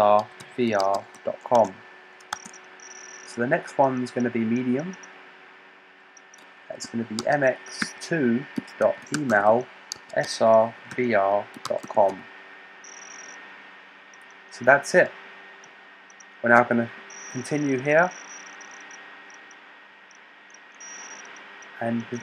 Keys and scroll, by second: 0.0-1.5 typing, 2.2 Tab, 3.5 typing, 6.7-12.5 typing.